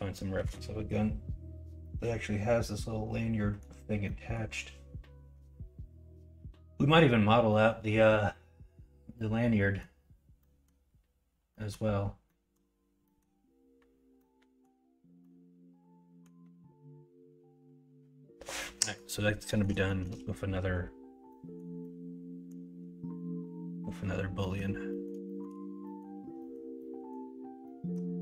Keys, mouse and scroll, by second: 18.8 middle click, 19.4 middle click, 19.8 shift+middle click, 24.4 middle click, 24.9 middle click, 25.2 shift+middle drag, 25.8 middle click, 26.4 middle click, 26.8 middle drag, 27.6-27.9 middle drag.